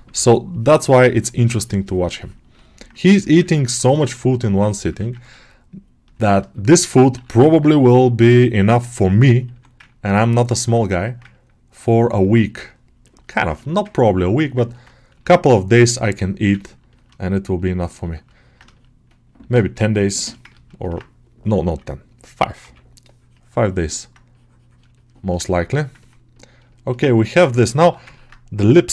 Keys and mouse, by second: 2.4 middle click, 3.2 ctrl+alt+middle click, 3.8-5.1 middle drag, 5.3 shift+click, 6.1 shift+middle click, 6.4 alt+middle click, 7.0 g, 7.4 ctrl+alt+middle click, 8.4 right click, 9.0 middle click, 9.4 1, 9.7 ctrl+click, 10.6 shift+middle click, 11.2 click, 12.1 alt+middle click, 12.3 click, 12.9 click, 13.2 middle click, 13.7 click, 14.6 middle click, 15.0 g, 15.2-16.4 drag, 16.4 ctrl+alt+middle click, 16.8 middle click, 17.1 right click, 17.9 middle click, 18.2-20.0 middle drag, 20.4 ctrl+alt+middle click, 20.7-25.5 ctrl+alt+middle drag, 25.6 middle click, 25.9 ctrl+middle click, 26.2 alt+middle click, 26.6 shift+middle click, 26.9 ctrl+middle click, 27.6 g, 28.0 ctrl+middle click.